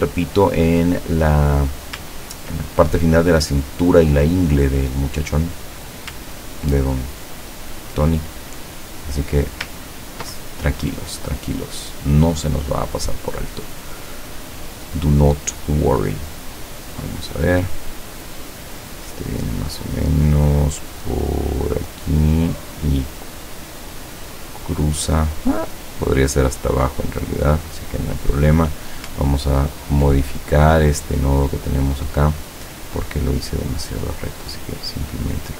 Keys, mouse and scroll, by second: 1.3-1.7 scroll up 2, 1.7-2.4 scroll down 4, 4.1 scroll down 2, 4.6 scroll down 2, 6.7 ctrl+scroll up 2, 7.5 ctrl+scroll down 2, 8.5-9.3 ctrl+drag, 10.0 ctrl+scroll down 2, 11.7 click, 17.0 click, 21.8-22.7 drag, 27.1 click, 28.6 click, 29.4-29.8 ctrl+scroll up 2, 30.4 ctrl+click, 32.9 click, 33.7-35.1 drag.